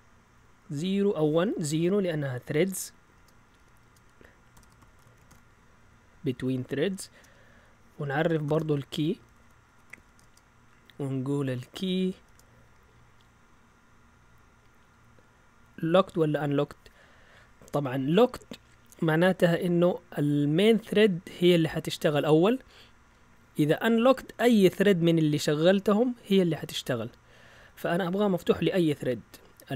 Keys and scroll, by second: 1.7 typing, 3.1-5.7 typing, 7.1 typing, 8.4-12.7 typing, 20.3 Down, 20.9-22.0 typing, 26.5 Up, 27.1-28.4 typing.